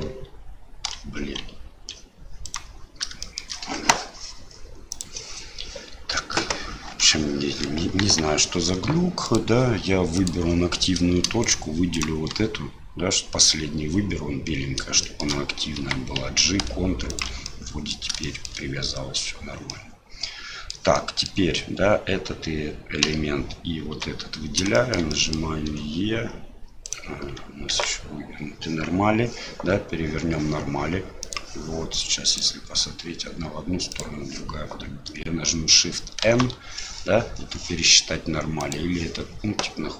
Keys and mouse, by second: 3.3 shift+click, 7.0 click, 8.0 KP_1, 11.4 shift+right click, 11.9 shift+right click, 15.0 shift+click, 17.5 click, 18.3 shift+middle click, 19.7-20.8 middle drag, 21.1 middle click, 23.9 l, 24.8 shift+click, 25.2 click, 25.7 e, 27.7 ctrl+z, 31.3-34.4 drag, 36.2 shift+n, 38.7-39.9 drag.